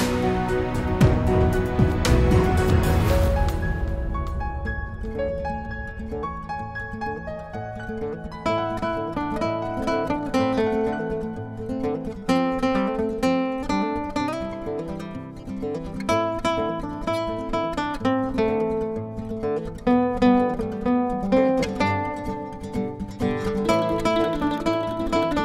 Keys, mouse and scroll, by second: 0.6 click, 1.8 F4, 3.4 F9, 6.5 F9, 7.0 click, 9.3 click, 10.4 click, 13.2 F4, 14.9 F9, 21.5 click, 24.8 click, 24.9 double click.